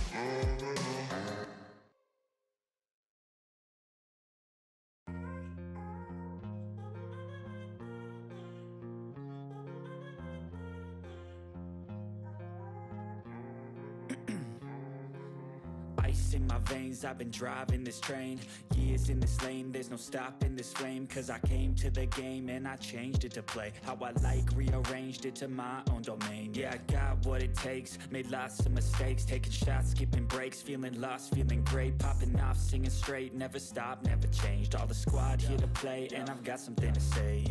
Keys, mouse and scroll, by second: 0.1 click, 1.7-3.9 drag, 3.9 ctrl+s, 6.1 ctrl+s, 6.8 typing, 7.4 ctrl+z, 10.4 space, 11.7 click, 12.1 ctrl+s, 13.0 click, 18.2-20.3 typing, 22.6 ctrl+s, 22.6-24.8 typing, 27.5-28.4 typing, 28.8 click, 33.3-37.5 drag.